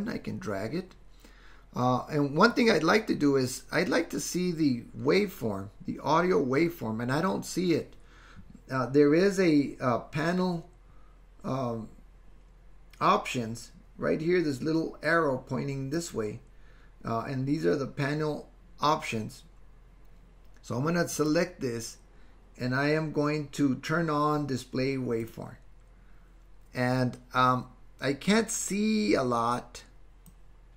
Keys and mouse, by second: 16.0 click, 30.5-30.7 drag.